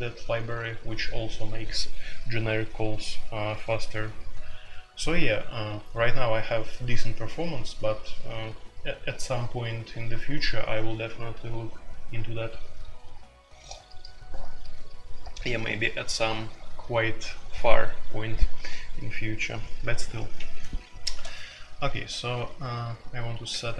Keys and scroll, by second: 21.1 typing, 23.3-23.7 typing.